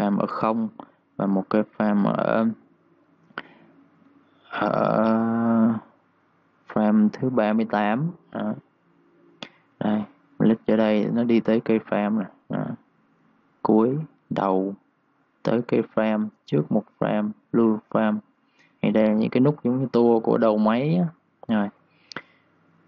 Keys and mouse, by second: 8.4 click, 22.7 click.